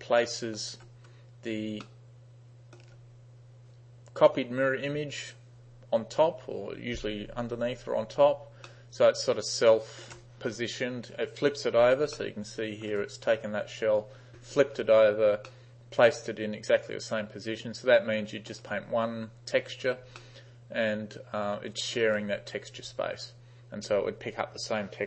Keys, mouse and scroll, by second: 0.3-0.6 alt+middle drag, 1.7 space, 1.9-2.8 middle drag, 8.2 space, 8.8-10.1 middle drag, 12.0 space, 12.2-12.9 middle drag, 15.0 space, 15.6-18.6 middle drag, 20.0 space, 20.2-22.0 middle drag.